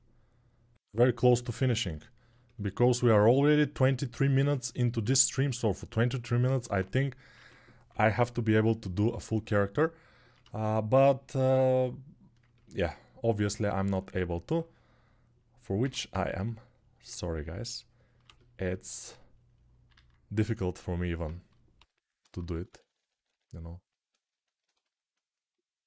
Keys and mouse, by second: 0.7-9.0 alt+shift+middle drag, 4.8 alt+q, 6.2 alt+q, 7.1 1, 7.6-8.4 [, 9.0-25.8 ctrl+drag, 15.6 x, 19.7 alt+q, 21.5-23.0 typing.